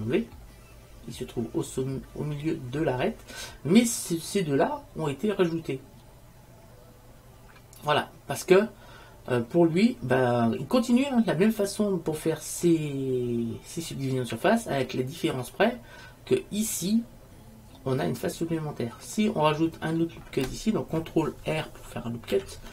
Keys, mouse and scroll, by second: 4.0-6.1 middle drag, 9.5-12.0 middle drag, 12.3 middle click, 15.0-17.0 middle drag, 22.4 ctrl+r.